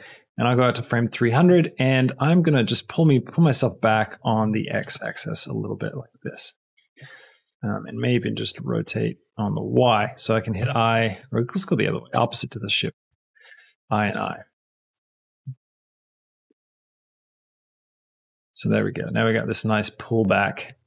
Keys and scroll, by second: 14.8 space.